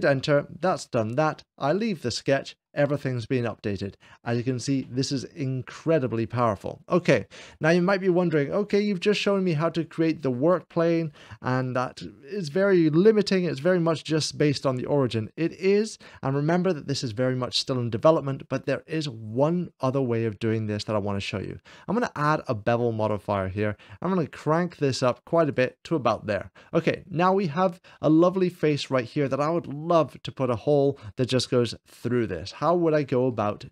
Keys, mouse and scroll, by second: 1.5 click, 1.9 Return, 1.9 typing, 2.5 click, 2.6-4.2 middle drag, 19.2-20.2 drag, 20.6-21.6 drag, 22.1-23.2 drag, 23.4-25.4 drag, 26.7-28.4 middle drag, 30.0-31.8 scroll up 2, 31.8-32.9 middle drag, 33.2 shift+middle click.